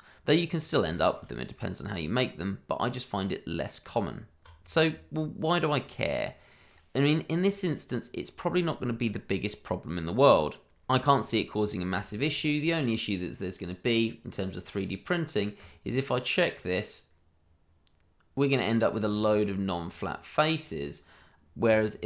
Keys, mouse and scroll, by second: 0.5 scroll down 1, 0.9 shift+middle click, 1.5 middle click, 3.9 Tab, 4.5-6.2 scroll down 1, 6.2 middle click, 10.9 shift+middle click, 10.9 middle click, 11.0 shift+middle click, 11.2-11.6 scroll up 1, 11.6 click, 12.0 shift+middle click, 12.0 middle click, 14.3 click, 17.4-18.4 scroll down 1, 18.4 middle click, 19.4-19.8 scroll up 1, 19.8 click, 21.4 scroll up 1, 21.6 Tab.